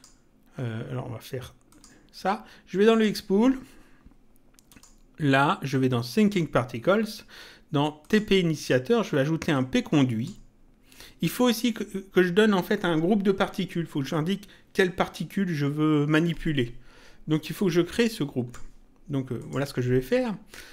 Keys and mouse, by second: 1.6 click, 2.9 click, 4.7 click, 6.1 click, 8.0 click, 9.5 click, 17.5 click, 19.4 click.